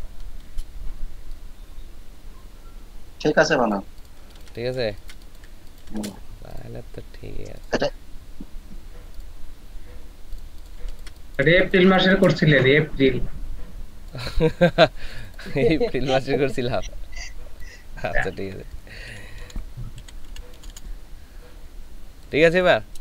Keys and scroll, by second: 10.8 ctrl+space, 11.4 ctrl+space, 19.2-20.7 typing.